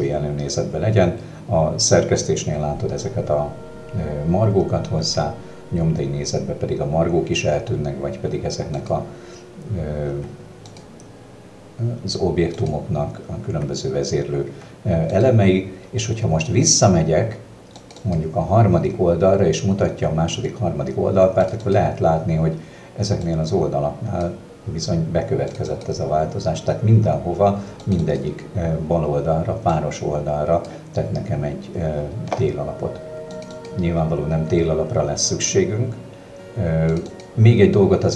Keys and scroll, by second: 5.1 w, 10.2 w, 13.5 w.